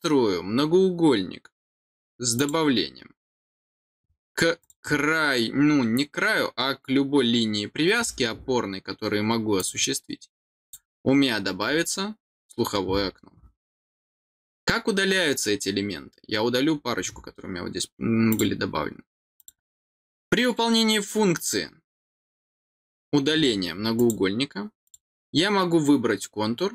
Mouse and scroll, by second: 2.3 click, 4.5 click, 9.5 click, 10.6 click, 11.6 scroll down 1, 14.3 middle click, 16.9 middle click, 18.2 click, 19.3 click, 24.8 click.